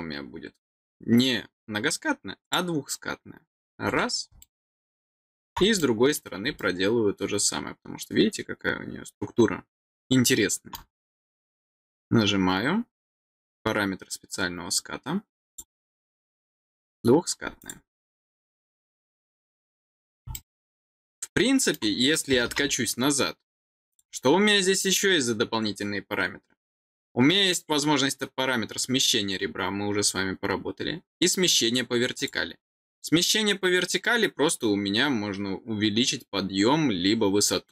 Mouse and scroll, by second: 2.4 click, 3.8 middle click, 4.3-5.4 middle drag, 5.7 middle click, 6.5-10.7 middle drag, 11.5 click, 15.4 click, 16.8 click, 17.5 click, 20.3-21.7 middle drag, 23.8 click, 32.1 click.